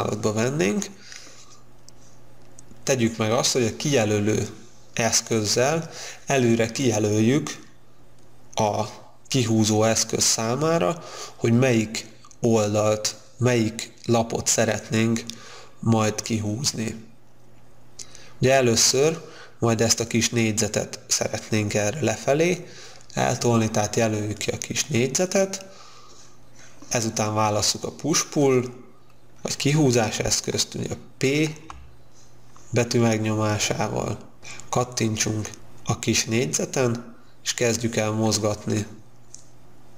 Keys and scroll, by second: 31.4 p.